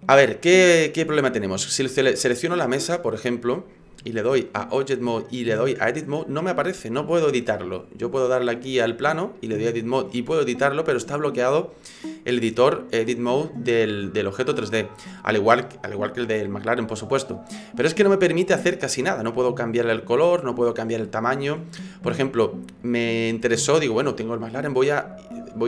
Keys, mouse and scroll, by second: 2.7 right click, 3.4 right click, 4.5 click, 8.1 right click, 9.2 click, 12.5 click, 15.1 right click, 22.1 middle click.